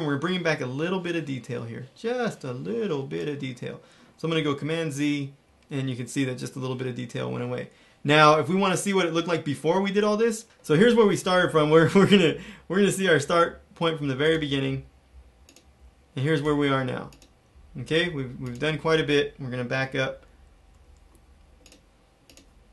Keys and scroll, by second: 4.5 super+z, 5.4 super+z, 19.8 super+-, 20.3 super+-, 21.1 alt+super+-.